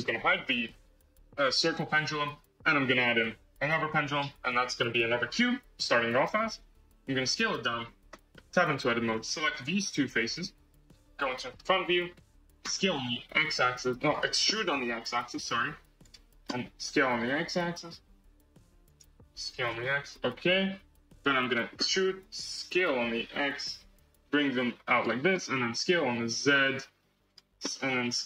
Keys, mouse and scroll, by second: 1.3 shift+a, 4.4 KP_1, 5.6 s, 8.0 Tab, 8.3-8.9 middle drag, 8.9 click, 9.3-10.2 middle drag, 10.2 shift+click, 11.0 KP_1, 12.0-12.4 scroll down 3, 12.6 s, 14.8 e, 16.8 s, 19.4 s, 21.7 e, 25.6 s, 27.7 middle click.